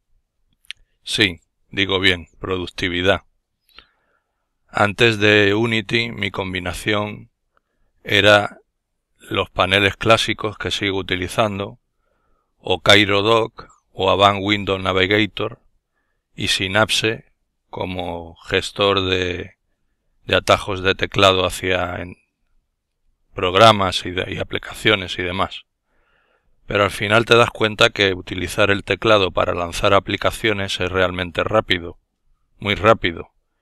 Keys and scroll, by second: 12.0 Escape, 21.2 super+f, 25.3 super+f.